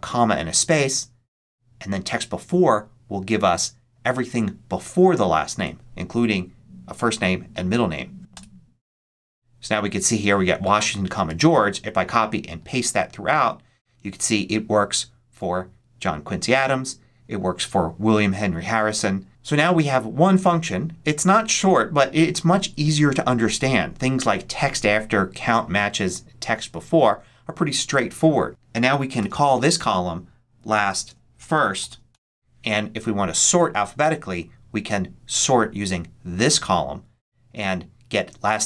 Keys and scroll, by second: 8.2 Return, 11.2 super+c, 12.5 super+v, 28.8-32.3 typing.